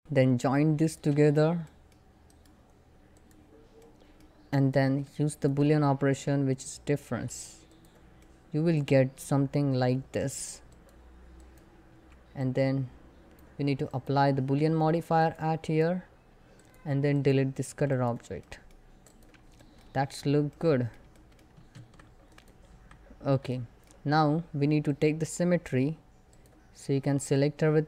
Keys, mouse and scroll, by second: 4.1 middle click, 4.3 click, 5.0 shift+click, 5.9 alt+x, 7.3 click, 7.9-10.3 middle drag, 10.3 click, 16.3 click, 17.3 x, 17.5 click, 18.1 middle click, 18.5 scroll up 1, 18.8 click, 19.3 shift+middle click, 19.5 scroll up 1, 20.1 middle click, 21.4 Tab, 21.9 click, 22.3 Tab, 22.8 scroll down 1, 23.2 middle click, 24.5 click, 26.8 a, 27.3 scroll up 1.